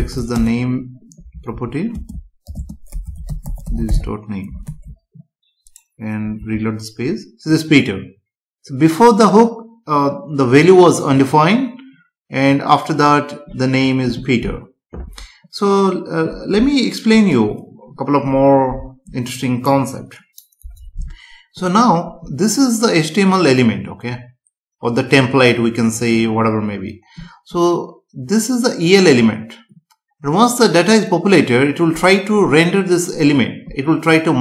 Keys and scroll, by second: 0.3 space, 1.5 Right, 1.9 space, 2.5 shift+space, 4.6 ctrl+s, 6.4 F5.